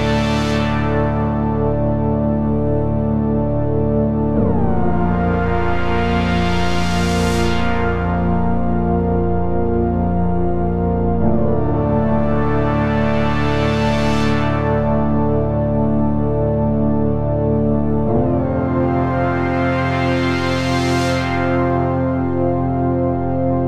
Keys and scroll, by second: 20.9 Delete.